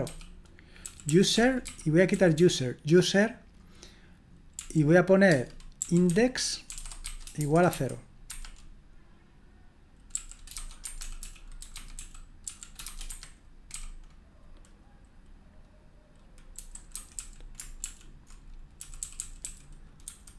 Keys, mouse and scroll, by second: 0.0-2.8 typing, 4.5-8.2 typing, 8.3 Escape, 10.1-13.7 typing, 16.9-20.3 typing.